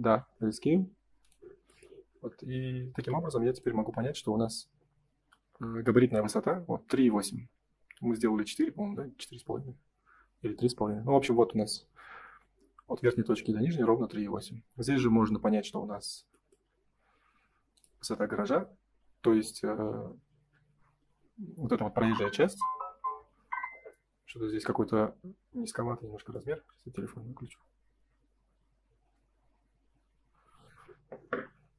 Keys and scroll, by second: 14.7 Escape.